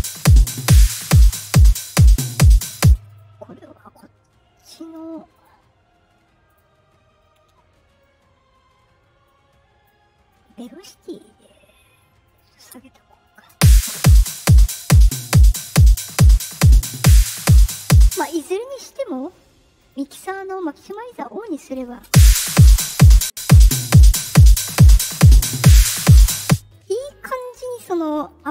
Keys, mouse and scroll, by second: 2.7 space, 3.0 click, 5.3 click, 6.4 click, 7.1 middle click, 7.1-7.4 scroll, 9.2 click, 10.2 click, 10.9 middle click, 12.2 click, 13.2 click, 13.5 space, 18.0 space, 19.7 click, 21.6 click, 22.0 space, 26.3 space.